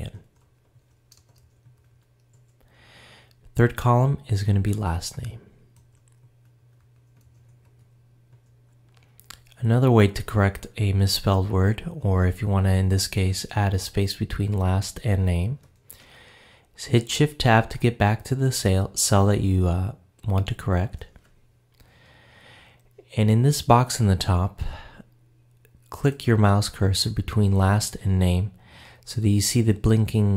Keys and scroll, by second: 20.7 shift+Tab.